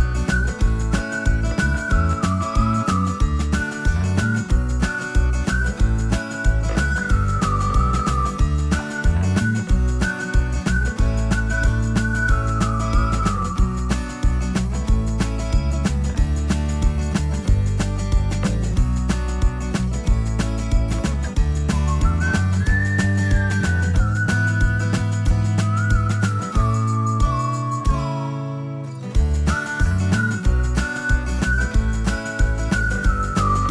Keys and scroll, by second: 0.0-6.5 typing, 23.7 space, 30.4-33.5 typing, 33.0 Insert.